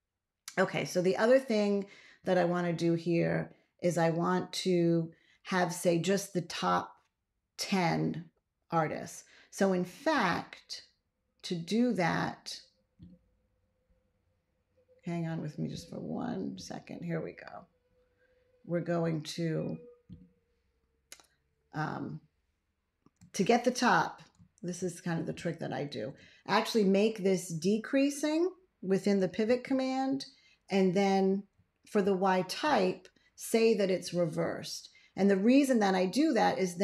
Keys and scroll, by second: 24.6 ctrl+a, 29.3 ctrl+x, 31.9 ctrl+a.